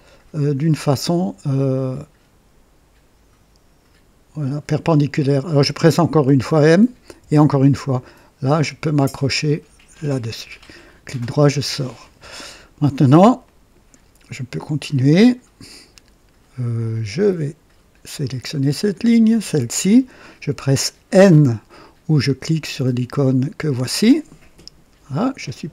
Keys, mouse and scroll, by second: 6.2 typing, 7.4 typing, 9.8 click, 10.8 right click, 11.0 typing, 11.5-11.9 scroll up 1, 12.0 right click, 13.4 right click, 15.6 right click, 16.9 right click, 18.1 click, 19.3 click, 24.3 n.